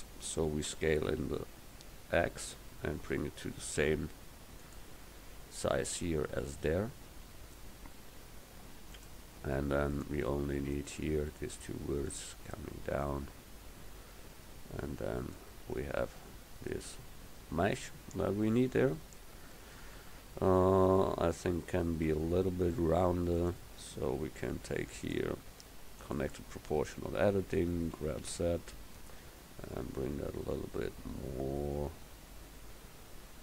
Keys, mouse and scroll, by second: 0.8 s, 7.1 s, 10.0-12.1 drag, 15.9 Tab, 19.0 KP_1, 22.2 Tab, 28.0 g.